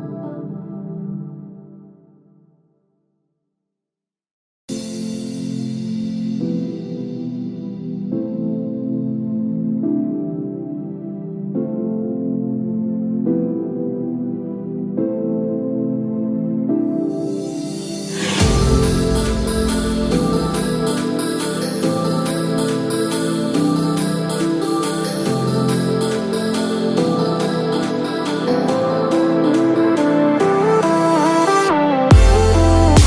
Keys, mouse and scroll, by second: 14.4 KP_0, 15.8 scroll down 1, 16.1-16.8 scroll up 2, 16.8-17.8 scroll down 1, 17.8 click, 20.5 scroll down 1, 20.7-21.5 scroll up 1, 21.8 space, 22.2 space.